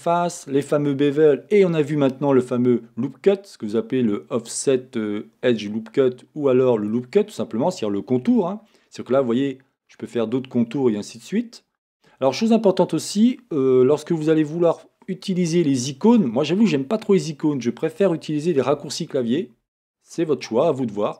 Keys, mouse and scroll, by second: 5.7-8.7 drag, 8.3 Escape, 8.7-10.1 middle drag, 10.1-12.0 scroll, 12.0 Escape, 16.1-18.2 drag.